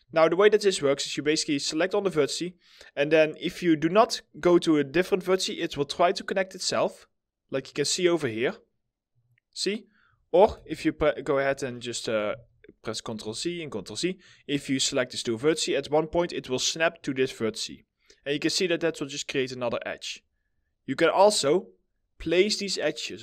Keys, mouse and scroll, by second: 0.2 right click, 0.6 scroll up 1, 10.8 BackSpace, 11.1 right click, 12.3 ctrl+z, 13.3 ctrl+z, 18.9 middle click.